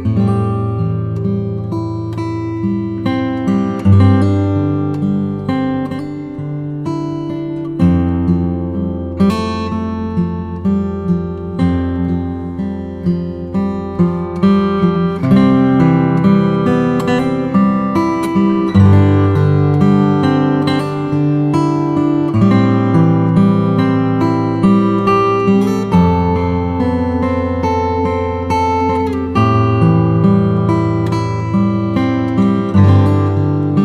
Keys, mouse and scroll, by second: 0.7-2.2 drag, 2.2-2.6 scroll up 2, 2.6 click, 2.9-4.8 right drag, 4.8-5.5 scroll down 4, 5.5-8.3 middle drag, 8.3 click, 9.3 shift+a, 12.9-15.4 drag, 15.4 s, 17.1 g, 18.7 s, 22.3 g, 24.1 s, 27.1 g, 28.7 s, 32.1-33.6 scroll up 2, 33.6 g.